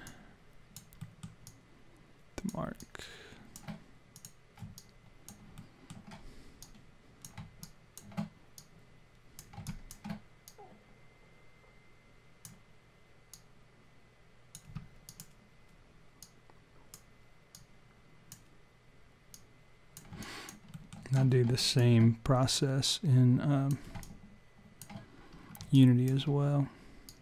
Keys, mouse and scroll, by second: 0.1 alt+click, 1.0 alt+middle click, 1.5 alt+click, 2.8 alt+click, 4.2 click, 4.8 alt+click, 5.6 alt+middle click, 6.6 click, 7.6 alt+click, 8.6 click, 9.7 alt+click, 10.5 click, 13.3 click, 15.1 click, 16.2 click, 17.5 click, 19.3 click, 20.2-20.7 alt+click, 20.7 alt+middle click, 21.3-21.9 scroll up 3, 21.6 alt+click, 22.5 click, 24.0 alt+click, 25.3 scroll down 3, 25.8 alt+click, 27.1 click.